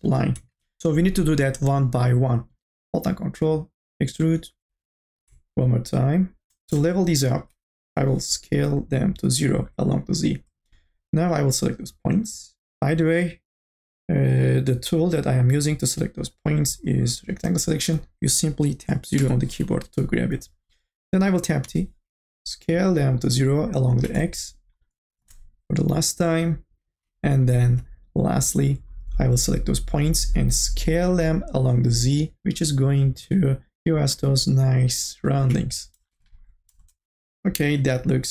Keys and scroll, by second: 6.7 space, 7.8 t, 10.5 space, 19.4 KP_0, 21.6 t, 24.1 space, 27.4 space, 30.9 t, 33.1 e, 36.7 space, 37.0 ctrl+z.